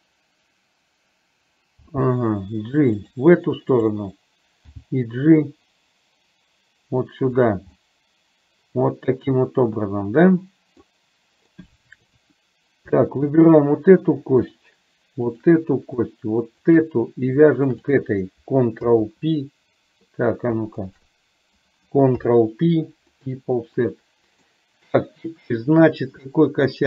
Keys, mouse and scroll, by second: 1.9 g, 3.9 click, 4.9 g, 7.7-11.0 middle drag, 11.6 middle click, 13.4 shift+click, 15.4 shift+click, 16.7 shift+click, 17.7 shift+click, 19.0 ctrl+p, 21.0 click, 22.2 ctrl+p, 23.9 middle click.